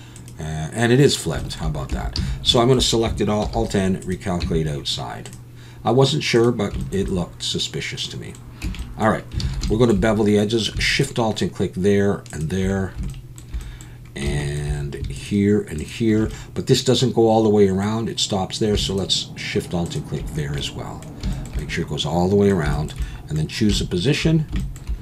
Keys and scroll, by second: 1.9 Tab, 2.2 a, 3.4 alt+n, 4.4 Tab, 8.6 Tab, 9.4 alt+a.